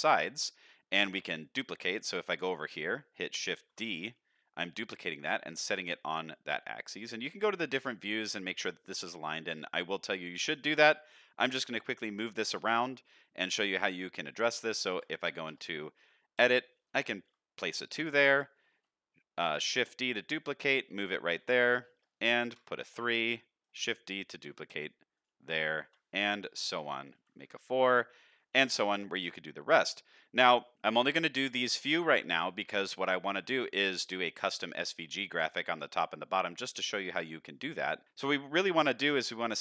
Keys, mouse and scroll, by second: 1.7-2.7 middle drag, 3.5 shift+d, 5.5-7.0 middle drag, 7.5 middle click, 8.5-8.8 middle drag, 9.5-9.9 middle drag, 10.9-11.6 middle drag, 12.2-12.9 middle drag, 13.6 middle click, 14.9 Tab, 15.5 BackSpace, 16.3 KP_2, 16.8 Tab, 17.3 middle click, 18.1 middle click, 19.6 shift+d, 20.8 middle click, 21.4 Tab, 21.9 BackSpace, 22.5 KP_3, 22.8 Tab, 23.3 middle click, 24.3 shift+d, 25.5 middle click, 25.8 Tab, 26.6 BackSpace, 27.1 KP_4, 27.4 KP_Enter, 27.9 Tab, 28.3 middle drag, 29.0-29.7 middle drag, 30.0-30.3 middle drag, 30.6 middle click, 31.7-32.5 middle drag, 32.7 shift+middle drag, 33.2-33.6 middle drag, 34.9 middle click, 36.2 middle drag, 37.6-38.2 middle drag, 38.7-39.2 middle drag.